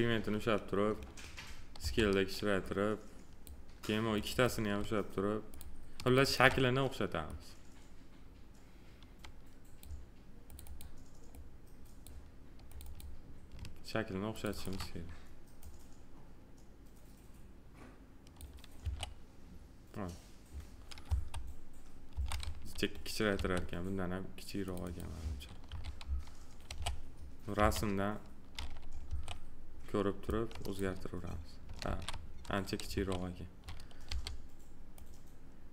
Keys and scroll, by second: 1.7 r, 18.7 2, 21.0 F4, 25.6 2, 29.0 2, 31.8 ctrl+z, 32.9 2.